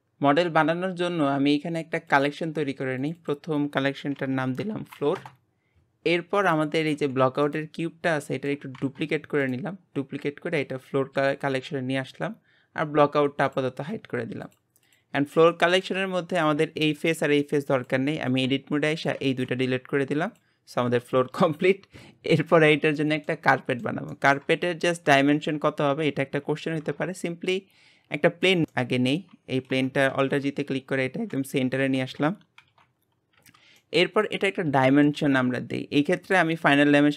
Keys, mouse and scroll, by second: 2.1 click, 3.2 click, 4.8 o, 6.4 click, 6.9 g, 8.2 middle click, 8.8 shift+d, 10.6 click, 13.4 click, 14.4 click, 14.8 click, 15.5 middle click, 16.0 Tab, 16.3 click, 17.7 click, 18.9 shift+click, 19.3 x, 21.4 Tab, 23.0-26.5 shift+middle drag, 26.5 shift+a, 28.7-30.1 middle drag, 30.1 alt+g, 30.6-32.6 scroll up 2, 32.6 shift+c, 33.0 scroll up 3, 33.3 w, 33.9-34.4 middle drag, 34.4-34.8 scroll up 2, 34.8-37.1 shift+middle drag.